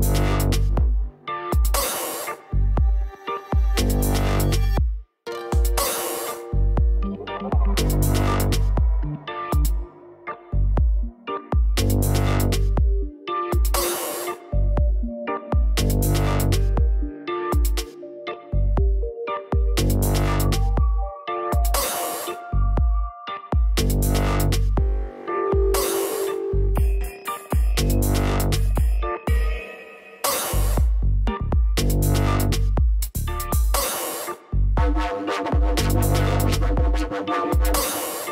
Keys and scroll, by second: 35.4 Return.